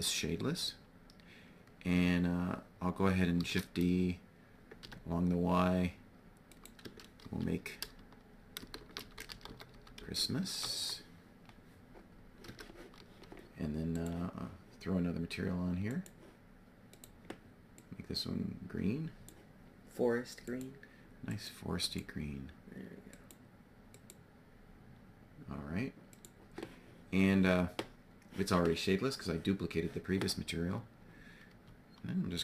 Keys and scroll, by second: 2.9 shift+d, 4.7 y, 6.8 Tab, 7.7-10.6 typing, 12.4 Tab, 31.0 g.